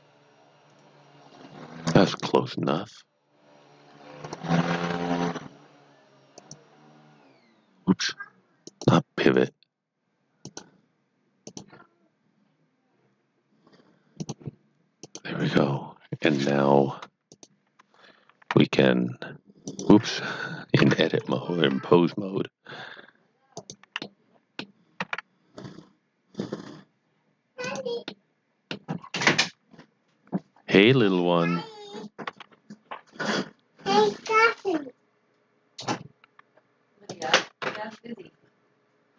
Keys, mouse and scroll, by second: 6.3 click, 14.2 click, 16.2 click, 18.5 r, 19.7 right click, 21.2 click, 21.7 r, 23.6 click, 24.0 middle click, 25.0 r, 27.6 click, 28.0 middle click, 29.2 r, 34.3 typing, 37.0-37.5 typing, 37.1 click.